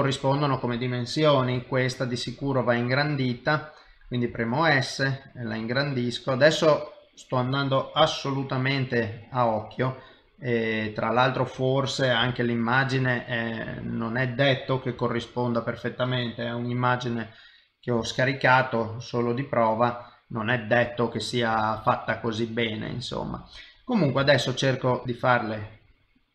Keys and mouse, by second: 0.2 click, 1.5 s, 9.9 middle click, 12.2 g, 13.7 shift+middle click, 14.9 s, 20.1 middle click, 20.1 g, 21.6 shift+middle click, 22.4 click, 22.8 middle click, 24.2 s, 25.0 s.